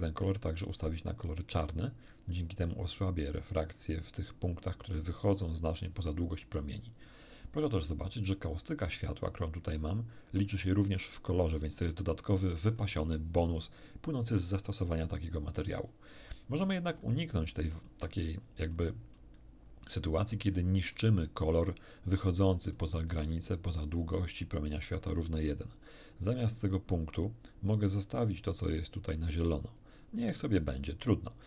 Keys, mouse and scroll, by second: 0.8-2.8 drag, 6.8 scroll down 2, 8.8-9.8 scroll up 6, 16.0-16.6 scroll down 2, 17.0-19.3 shift+middle drag, 19.7-21.1 shift+middle drag, 21.2 middle click, 21.9-22.9 middle drag, 23.1 middle click, 26.6 click, 28.2 click, 29.2-30.0 drag.